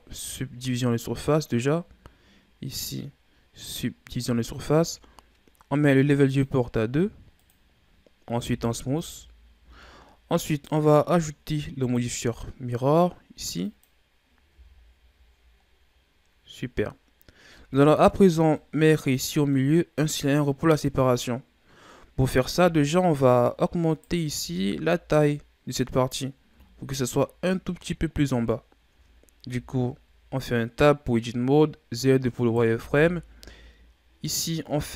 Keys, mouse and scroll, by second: 4.6-5.3 scroll down 1, 5.3-6.2 scroll down 1, 6.2-8.3 drag, 8.3 w, 9.6 a, 10.4 right click, 11.8-14.4 drag, 14.4 a, 14.7-16.0 scroll down 9, 16.5-17.4 scroll up 6, 17.4 KP_1, 18.5-21.5 middle drag, 22.6 KP_3, 23.8 right click, 24.4 Tab, 26.6-27.2 shift+scroll down 5, 27.2-28.5 scroll up 2, 28.5-29.4 shift+scroll up 3, 29.4 z, 32.3 right click, 32.7 b.